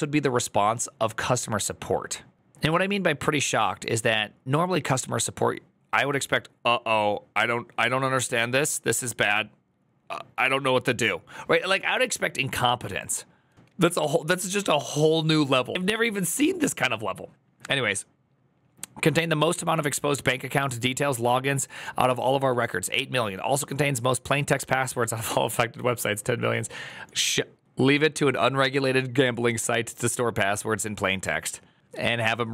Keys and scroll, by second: 13.5 alt+[.